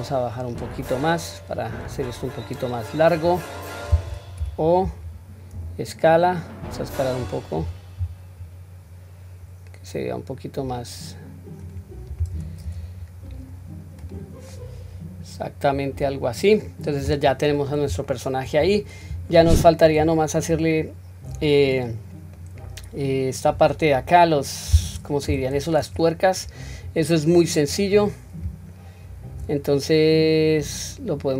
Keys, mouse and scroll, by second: 5.6 s, 12.4 Tab, 12.7 q, 13.2-13.7 scroll down 1, 14.0 click, 14.0 scroll down 2, 14.5-15.5 middle drag, 15.7-16.7 scroll down 2, 16.1-17.0 middle drag, 17.5-18.1 scroll down 2, 18.1 shift+middle click, 18.6-19.1 scroll up 3, 19.6 shift+middle click, 20.1 shift+middle click, 22.4-23.5 middle drag, 22.4 scroll down 1, 25.3 KP_1, 26.2 scroll up 1, 26.9 scroll down 1, 27.7 click, 30.1-30.4 scroll down 1, 30.8-31.3 scroll down 1.